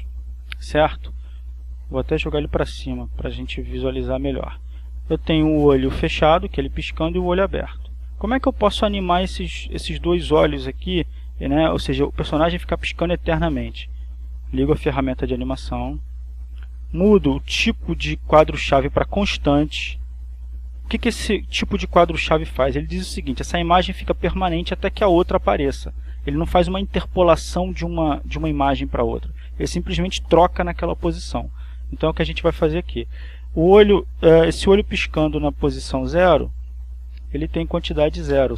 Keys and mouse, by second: 2.7 click, 14.5 click, 17.2-20.7 drag, 36.9 click, 38.2 0.